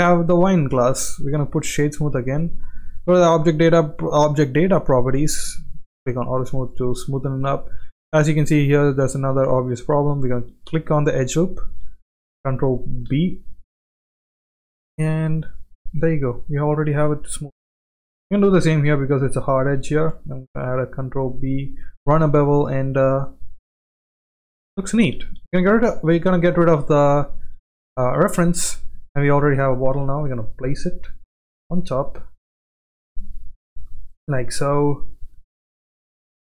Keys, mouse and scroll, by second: 0.2 shift+middle drag, 0.6-3.7 right drag, 6.0 click, 6.7-7.4 middle drag, 8.3 middle click, 8.6 click, 9.0 Tab, 10.6 click, 10.8 2, 11.0 click, 11.3 alt+click, 13.1 ctrl+b, 15.8 middle click, 17.0 click, 20.0 ctrl+b, 22.1 click, 22.3 Tab, 22.6-23.3 middle drag, 24.2-24.5 middle drag, 25.4 x, 26.1 shift+middle click, 27.0-27.5 shift+middle drag, 27.8 drag, 29.9 g, 31.3 g, 33.0 KP_1, 33.9 shift+middle click, 34.7 shift+middle click, 35.4 shift+middle click, 35.9-36.2 middle drag.